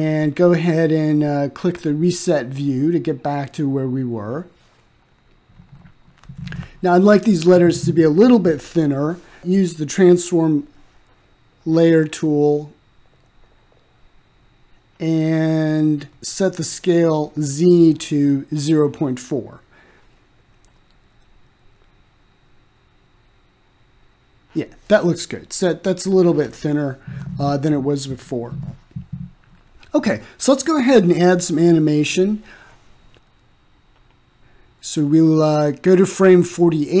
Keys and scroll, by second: 15.5 m, 20.9 0, 21.4 ., 21.9 4, 22.7 Return.